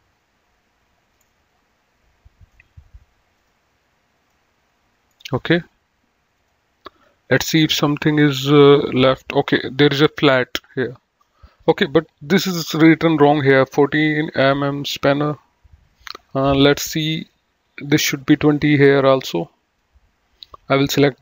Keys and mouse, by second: 1.1 middle click, 3.3 click, 4.3 middle click, 6.3 click, 7.5 click, 18.1 click, 19.4 middle click, 20.6 click.